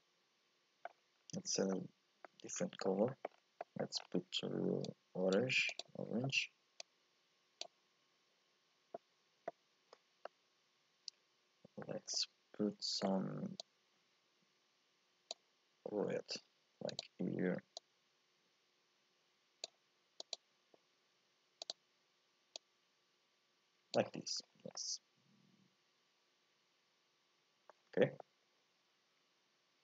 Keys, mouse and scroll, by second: 1.2 scroll down 1, 1.6 scroll up 1, 1.7-3.3 middle drag, 3.3-3.6 scroll up 4, 3.6 middle click, 4.0-4.8 scroll up 3, 4.8 click, 10.2-13.3 middle drag, 13.6-16.6 drag, 16.9 click, 17.8-20.3 drag, 21.6 click, 24.5 scroll down 1, 24.7 scroll up 1, 24.7-27.8 middle drag, 27.8 scroll up 1, 28.0-29.8 shift+middle drag.